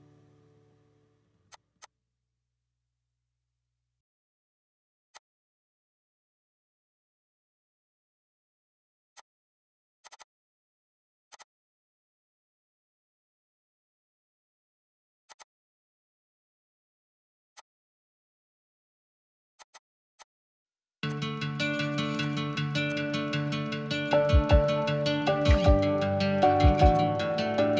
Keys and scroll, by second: 5.9 Delete, 9.7 Delete, 10.3 Delete, 11.6 Escape.